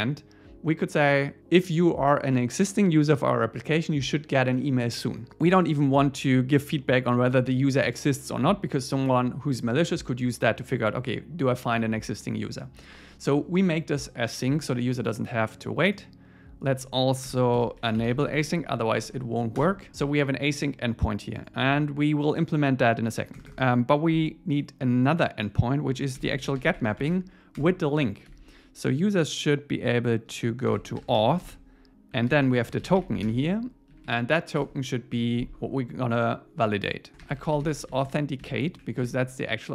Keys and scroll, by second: 17.3 Return, 17.6 alt+l, 19.6 Return, 19.9 super+s, 23.3 Return, 26.2 alt+l, 27.6 Return, 32.3 alt+8, 33.3 alt+9, 33.9 Right, 34.6 Return.